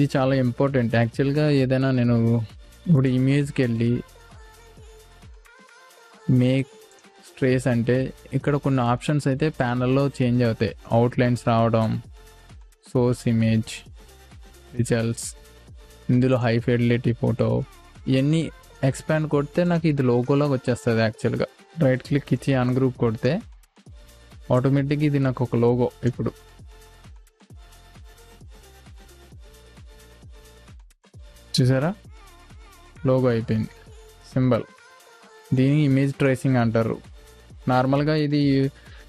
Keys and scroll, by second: 2.5 ctrl+space, 21.6 v, 23.9 Delete, 29.9 i, 30.5 v, 31.5 space, 34.0 ctrl+z, 35.3 ctrl+g, 35.7 space, 38.4 Delete.